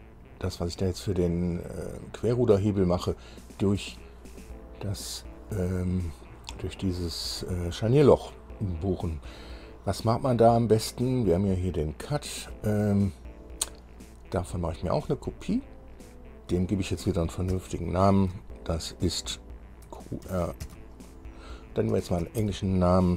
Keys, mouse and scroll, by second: 2.5 scroll down 2, 10.2-10.6 scroll down 2, 11.7 click, 15.1 click, 15.9 scroll down 2, 16.7 click, 17.7 F2, 20.5 shift+q, 20.5 shift+r, 20.9 shift+-, 22.2 shift+f, 22.5 l.